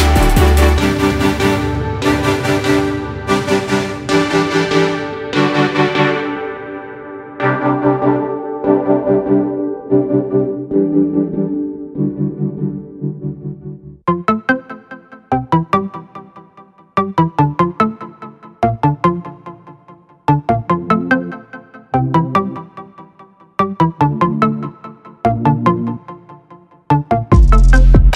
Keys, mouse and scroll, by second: 0.5 shift+click, 1.1 click, 2.1 click, 2.7 ctrl+click, 3.3 click, 4.3 ctrl+click, 4.7 ctrl+click, 5.2 click, 5.8 click, 6.7 click, 10.5 click, 11.2 ctrl+click, 11.7 click, 12.8 ctrl+click, 13.3 ctrl+click, 13.6 click, 14.8 click, 15.5 click, 17.6 click, 18.0 click, 18.6-20.0 drag, 20.0 ctrl+z, 20.6-22.4 drag, 24.2 click, 24.8 click, 25.2 shift+click, 25.6 shift+click, 25.9 shift+click, 26.3 shift+click, 26.6 shift+click, 27.1 shift+click, 27.3 shift+click, 27.6 click.